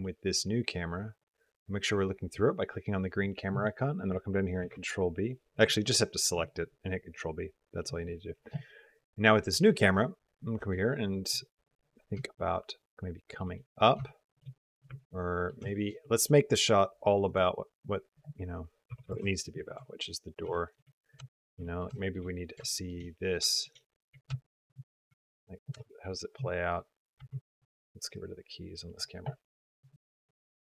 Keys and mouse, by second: 0.9 click, 4.4 ctrl+b, 12.3 shift+click, 13.4 middle click, 13.9 shift+middle click, 14.3 middle click, 14.8 ctrl+middle click, 15.5 shift+middle click, 15.8 middle click, 17.1 click, 18.0 click, 19.7 shift+click, 19.9 click, 20.3 shift+drag, 20.8 drag, 21.1 shift+drag, 21.4 click, 21.8 shift+click, 22.1-22.4 drag, 22.5 shift+drag, 22.8 click, 23.3 shift+click, 23.7 click, 24.3 shift+click, 24.6 click, 25.1 shift+click, 25.6 space, 27.4 space, 28.0-28.8 drag, 29.6 click, 29.9 space.